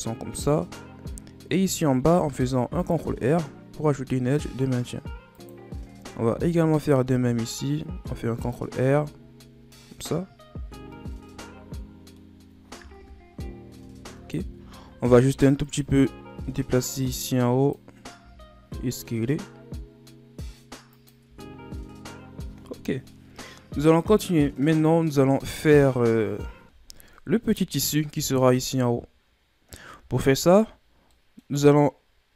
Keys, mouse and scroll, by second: 0.9-2.0 scroll up 1, 2.0 ctrl+r, 6.3 ctrl+r, 8.7 Tab, 10.2-10.5 scroll down 2, 10.5 a, 10.9-13.0 middle drag, 13.0 KP_1, 13.9-14.6 shift+scroll up 10, 14.6 Tab, 15.6 alt+right click, 16.1 shift+scroll down 4, 16.4-17.1 scroll up 1, 17.1-18.2 drag, 18.2 s, 21.3 Tab, 21.9-25.0 scroll down 5, 27.9-28.4 shift+scroll down 1, 28.4-29.0 middle drag, 29.0-31.2 scroll up 2, 31.2-32.3 middle drag.